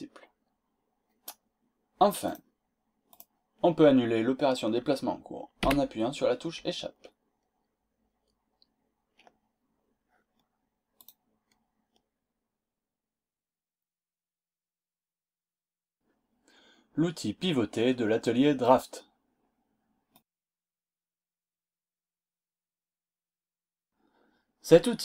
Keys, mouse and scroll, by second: 2.3 click, 3.1 click, 5.6 Escape, 10.9 click.